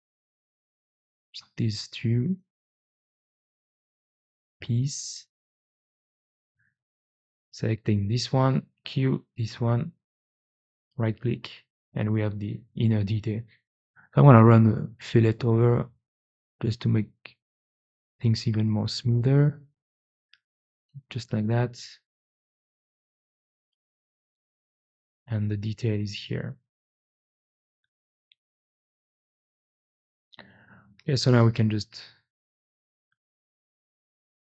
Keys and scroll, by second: 6.2 4, 8.6 q, 13.4 2, 22.9 e.